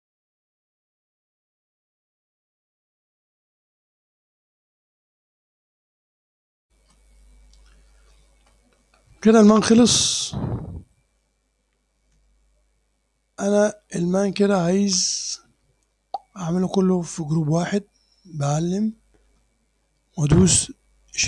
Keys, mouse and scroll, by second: 0.0 scroll up 1, 0.1 click, 0.9 scroll up 1, 1.1 click, 1.7-2.3 scroll up 1, 2.2 Return, 3.8 click, 4.3 click, 4.8 ctrl+scroll up 1, 5.3 ctrl+s, 6.6 click, 6.8 super+r, 11.0 click, 12.3-13.8 ctrl+drag, 14.1 click, 18.7 click.